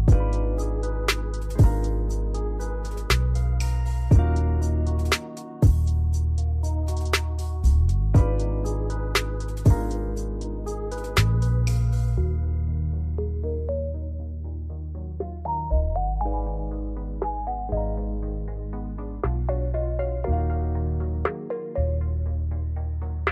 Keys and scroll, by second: 5.2 space, 7.8 space.